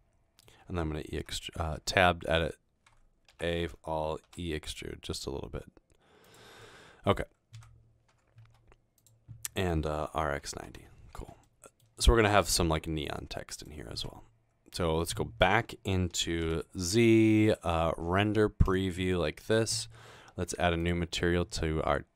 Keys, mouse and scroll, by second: 1.2 e, 1.8 Tab, 2.3 e, 3.3 a, 4.3 e, 7.6 Tab, 7.6-8.4 typing, 9.8-11.1 typing, 12.3-14.5 typing, 16.0-16.8 typing.